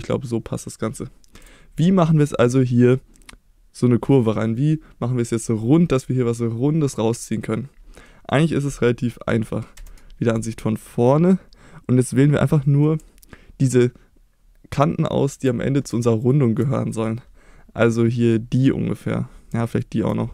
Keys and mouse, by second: 1.4 KP_Enter, 2.4 middle click, 3.2 middle click, 5.8 middle click, 7.3 middle click, 8.1 middle click, 9.8 KP_1, 12.1 click, 19.8 shift+click.